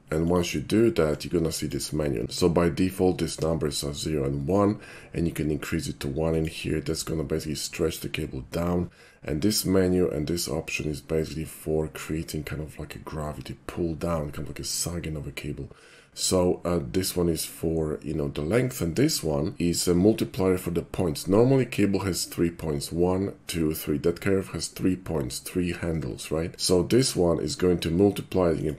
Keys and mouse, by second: 0.3 click, 1.1-1.7 drag, 6.4 click, 28.6 click.